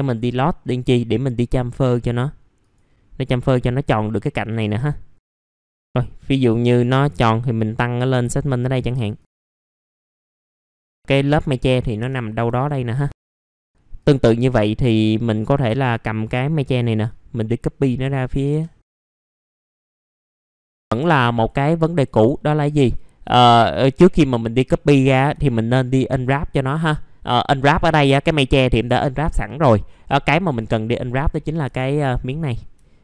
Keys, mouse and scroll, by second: 0.6 scroll up 1, 0.9 right click, 2.6 click, 3.6-4.5 scroll up 1, 4.5 click, 5.8 middle click, 7.0 click, 9.5 middle click, 9.5 scroll down 1, 9.7 click, 9.9 middle click, 10.0 alt+middle click, 10.2-11.4 drag, 11.5 alt+middle click, 12.0 F4, 12.2 scroll down 1, 12.5 alt+middle click, 12.9 click, 13.2 middle click, 13.6-14.0 scroll up 1, 14.0 click, 15.7 alt+middle click, 17.1 shift+click, 19.2 scroll up 1, 19.4 alt+middle click, 19.7 click, 20.5 scroll down 1, 20.6 alt+middle click, 21.3 click, 22.3 alt+middle click, 22.7 F4, 23.3 alt+middle click, 24.0 alt+middle click, 25.5-27.9 scroll down 1, 27.9-30.4 scroll up 1, 30.4 click, 31.1 middle click, 31.6 F4, 32.8 alt+middle click.